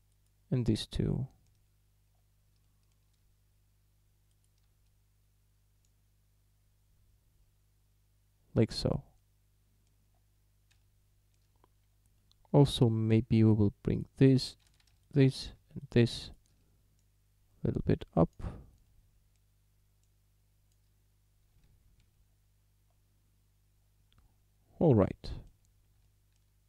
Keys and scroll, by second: 12.9 a, 14.7 ctrl+z, 21.7 Tab.